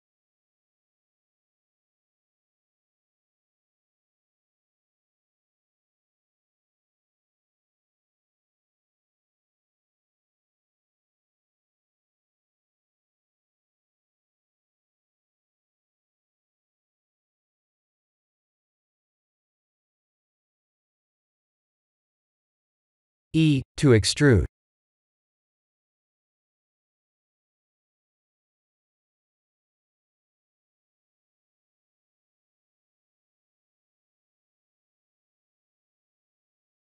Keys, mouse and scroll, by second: 1.6 middle click, 1.8 middle click, 1.9 middle click, 2.6-4.8 scroll up 1, 4.8 scroll up 1, 4.8 KP_3, 5.5 shift+z, 5.8-6.7 scroll up 11, 7.0 g, 11.7 middle click, 12.2 middle click, 12.2 shift+z, 12.6-14.1 scroll down 11, 14.1 middle click, 16.3 middle click, 17.7-18.0 scroll down 3, 18.0 middle click, 18.9 middle click, 19.0 middle click, 19.3 middle click, 19.6 middle click, 20.5 middle click, 20.5 middle click, 20.9-21.5 scroll up 1, 21.5 middle click, 21.8 middle click, 22.5 Tab, 22.7 3, 22.9 click, 23.3 middle click, 23.9 middle click, 24.4 e, 26.3 click, 27.5 KP_1, 28.0 shift+z, 28.8-30.1 scroll up 9, 30.1 e, 33.2 middle click, 34.0-34.8 scroll down 6, 34.8 Tab, 35.3 middle click, 36.0-36.6 scroll down 3, 36.6 middle click, 36.7 middle click.